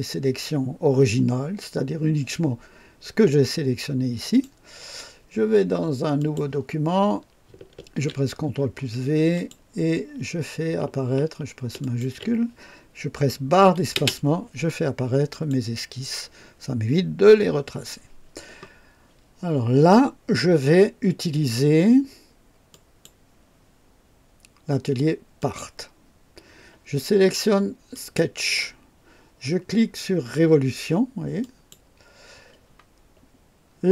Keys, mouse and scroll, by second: 4.1 click, 6.1 click, 7.7 ctrl+v, 7.7 ctrl+v, 9.2 click, 11.7 shift+click, 13.9 space, 15.2 click, 22.6 click, 25.3 click, 27.8 click, 31.3 click.